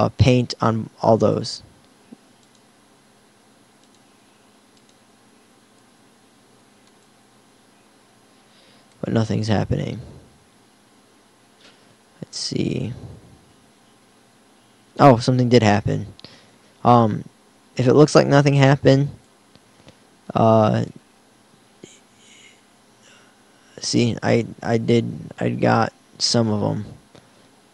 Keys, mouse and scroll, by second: 0.0-2.0 drag, 2.0 middle click, 2.7-3.9 drag, 9.8-14.2 middle drag, 19.3-21.0 drag, 22.3 r.